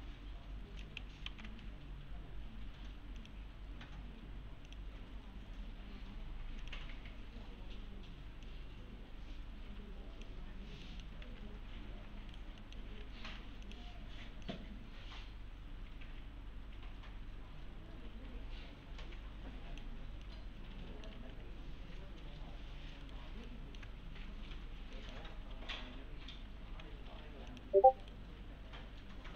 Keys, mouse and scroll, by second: 1.3 alt+x, 3.2 click, 5.2-5.8 scroll up 1, 6.6 click, 6.9-8.5 scroll up 1, 8.5-10.3 click, 10.6 scroll down 1, 10.9 middle click, 11.2 alt+1, 12.3 right click, 12.6 middle click, 12.8 scroll down 1, 13.0 2, 13.4 2, 13.6 click, 20.2-21.2 alt+middle click, 21.2 alt+1, 23.0 right click, 23.5-24.1 alt+middle click, 24.0 scroll down 1, 25.0 middle click, 26.6 alt+1, 27.5 click, 28.0 right click.